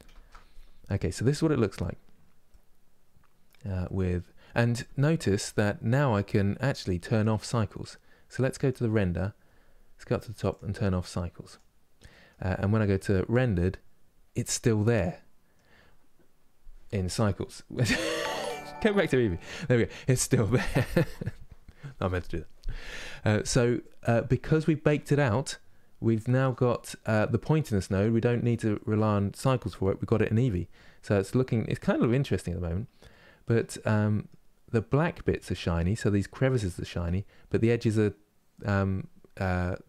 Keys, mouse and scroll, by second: 1.3-2.3 scroll up 1, 2.3-11.2 middle drag, 11.2 click, 11.8-13.1 middle drag, 13.1 click, 14.1 scroll down 2, 14.4 middle click, 15.3-15.6 scroll down 1, 15.6-16.0 scroll up 1, 18.3 click, 19.1-23.4 middle drag, 23.4-24.1 scroll down 1, 24.1-26.3 middle drag, 26.3 scroll up 3, 27.1-27.6 scroll down 2, 27.6-30.4 middle drag, 30.4 scroll up 2, 31.5-34.3 middle drag, 34.3 scroll up 1, 34.8-39.8 middle drag.